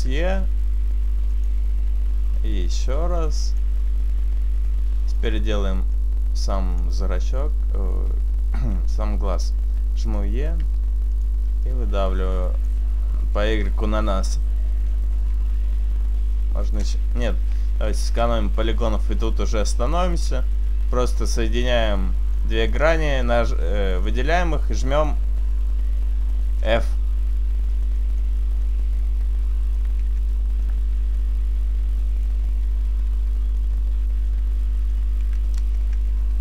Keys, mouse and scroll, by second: 1.3 s, 2.1 click, 3.7 right click, 3.7 e, 4.8 s, 6.9 click, 10.1 e, 11.1 s, 11.7 click, 14.8 e, 15.3 s, 17.2 ctrl+z, 17.2 click, 18.1 ctrl+z, 19.6 right click, 20.6 shift+right click, 20.6 f, 22.3 shift+right click, 22.4 middle click, 22.7-23.1 scroll up 3, 23.7 shift+middle click, 24.6 middle click, 26.2 shift+right click, 27.9 shift+right click, 27.9 f, 28.3 middle click, 29.7 shift+right click, 30.1 f, 30.7 middle click, 32.2 shift+right click, 33.5 right click, 34.9 shift+right click, 35.2 f, 35.9 Tab, 36.1-36.4 scroll down 2.